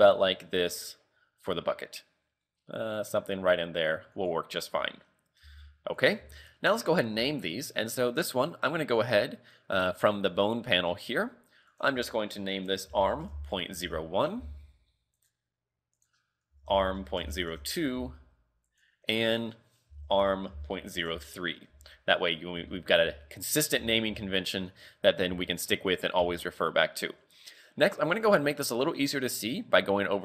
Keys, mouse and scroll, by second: 4.5 scroll down 7, 4.8 z, 5.5 g, 6.2 z, 6.4 scroll down 1, 6.6 shift+middle click, 7.2 a, 7.8 right click, 10.2 click, 10.9-11.8 scroll up 9, 11.8 click, 15.2 right click, 16.0 click, 18.7 right click, 19.3 click, 22.2-22.7 scroll up 3, 22.8 shift+middle click, 23.1 z, 23.3-23.8 scroll down 2, 23.8 z, 24.3 shift+middle click, 25.7 shift+middle click, 26.2 z, 28.7 click.